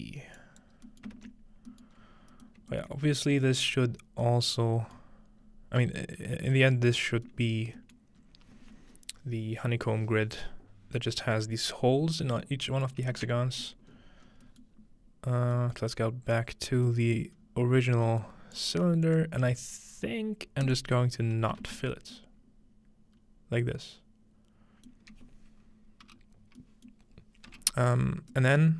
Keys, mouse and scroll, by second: 0.8-2.0 scroll down 1, 1.4 ctrl+middle click, 2.0 ctrl+middle click, 2.0-3.7 scroll up 4, 2.7-4.5 alt+middle drag, 3.7-4.5 scroll down 1, 5.0-6.6 middle drag, 5.4-6.8 scroll up 2, 6.8-7.3 middle drag, 6.9 scroll down 2, 7.4-7.8 middle drag, 8.0-9.8 middle drag, 8.2 scroll up 2, 12.7-14.1 middle drag, 13.4-13.9 scroll down 2, 13.9-14.6 scroll up 4, 14.8 scroll down 1, 16.0 scroll up 2, 17.4-20.7 scroll up 6, 18.6-21.7 drag, 21.2-21.7 scroll down 2, 22.2-24.4 ctrl+middle drag, 25.2-28.3 middle drag, 25.2-26.9 scroll down 2, 26.1 e, 28.6-28.7 middle drag.